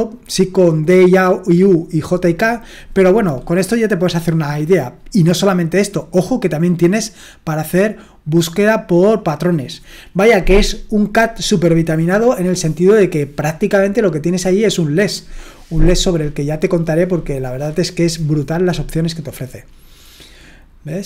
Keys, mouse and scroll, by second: 8.0-9.3 right drag.